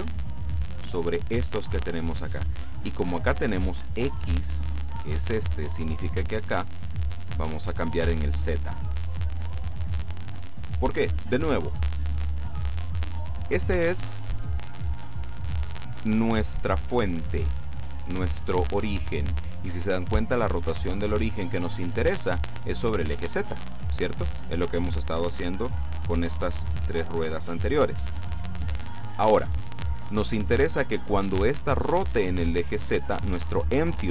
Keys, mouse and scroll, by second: 6.1 click, 8.5 click.